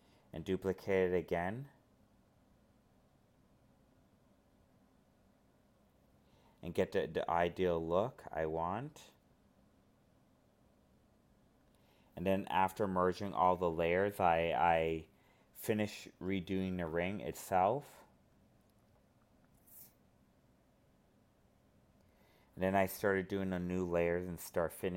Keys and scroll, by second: 23.9 alt+space.